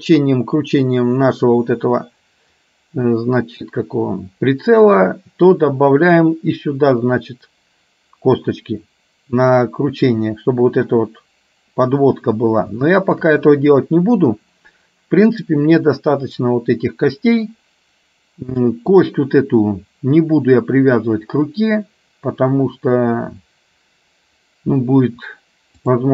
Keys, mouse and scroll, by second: 13.0 shift+middle click, 18.9 click, 25.9 click.